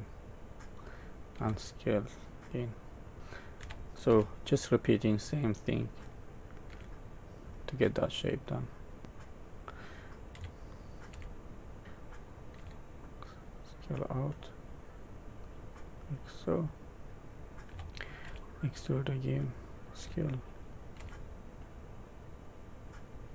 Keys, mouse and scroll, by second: 1.3 s, 3.6 e, 6.7 s, 10.3 e, 12.6 s, 17.7 e, 20.0 s, 20.7 e.